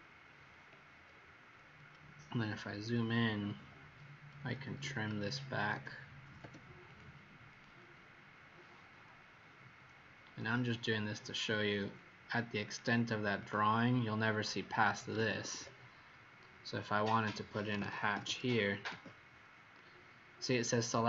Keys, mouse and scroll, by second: 1.5 scroll up 4, 2.2-2.6 scroll up 3, 3.5-4.8 scroll up 2, 4.8 typing, 6.8 click, 7.4 click, 8.3-9.0 scroll down 5, 10.2-10.5 scroll down 1, 11.1 scroll up 2, 12.6 click, 15.1 Escape, 15.3 Escape, 15.5 Escape, 16.2 middle click, 17.4-18.7 typing, 18.8 Return.